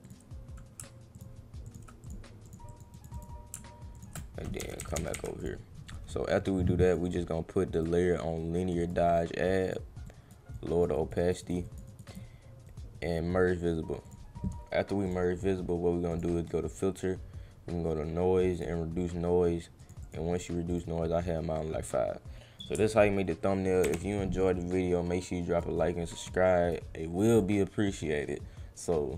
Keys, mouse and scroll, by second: 1.2 alt+click, 1.6 alt+click, 2.0 click, 2.4 click, 2.6 click, 2.9 click, 3.1 click, 4.0 alt+click, 5.4 click, 6.9 click, 7.7 click, 8.8 click, 9.6 click, 10.0 click, 10.5 click, 10.9 click, 11.2 click, 11.4 click, 11.6 click, 11.8 click, 12.1 click, 12.6 right click, 14.0 click, 15.0 click, 16.1 click, 18.5 click, 19.8 click, 20.0 click, 20.7 click, 21.5-22.6 drag, 24.4-25.6 drag, 25.7 click, 27.3 click, 28.3 click.